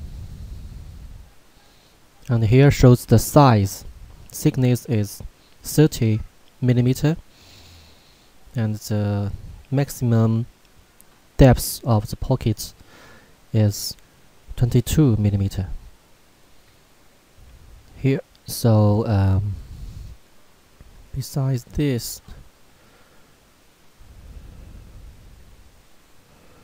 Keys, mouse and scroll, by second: 0.8 scroll up 1, 3.6 scroll down 1, 13.2-15.4 scroll up 1, 20.2 scroll down 1, 21.5-22.5 scroll up 1, 25.4 scroll up 1.